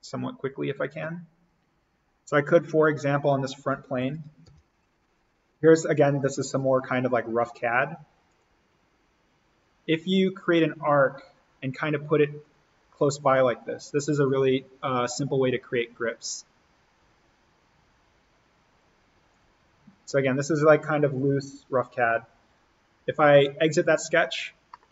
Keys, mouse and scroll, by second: 2.2 click, 2.5-3.7 scroll up 1, 4.0 alt+s, 4.5 alt+n, 7.5 a, 8.3 click, 12.9 Escape, 13.3-19.3 drag, 19.6-20.1 scroll up 1, 20.1-21.9 scroll down 1, 23.7 click, 24.7 middle click.